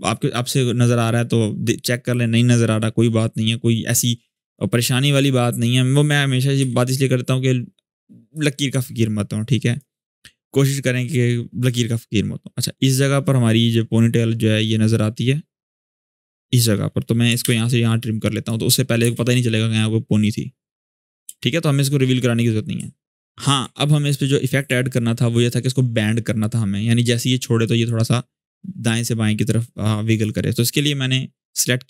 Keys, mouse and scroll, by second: 4.1 click, 4.6-5.0 scroll down 1, 6.3 u, 8.4-9.6 drag, 10.6-14.3 drag, 17.2 alt+[, 17.7-18.3 click, 18.5 scroll down 1, 18.8 space, 20.6-21.2 click, 21.0 space, 22.1-23.1 click, 23.4 alt+scroll up 1, 23.8-24.3 shift+scroll down 1, 24.5 alt+scroll up 1, 25.2-25.8 drag, 26.9-27.5 drag, 29.6-30.2 drag.